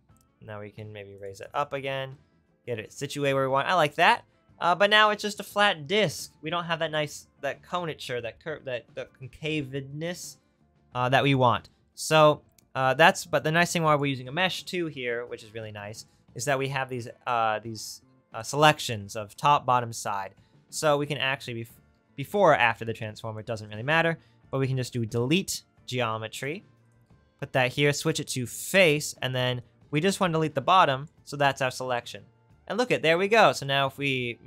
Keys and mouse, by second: 1.2-18.9 drag, 18.9-21.2 right drag, 21.2 click, 22.1 shift+a, 22.3-26.9 drag, 26.9 right click.